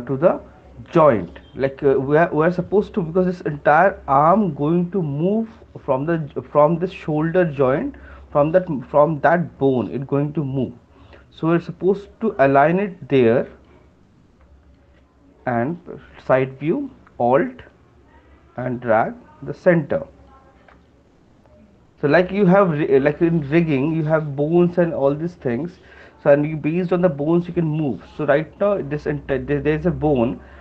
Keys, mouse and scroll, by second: 1.9 alt+click, 14.8 shift+click, 20.2 alt+click, 23.0 shift+click.